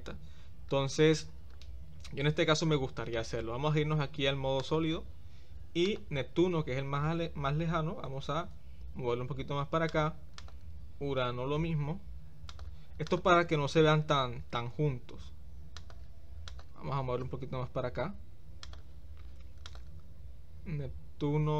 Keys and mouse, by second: 4.6 click, 5.9 click, 8.0 g, 16.5 click, 17.2 g.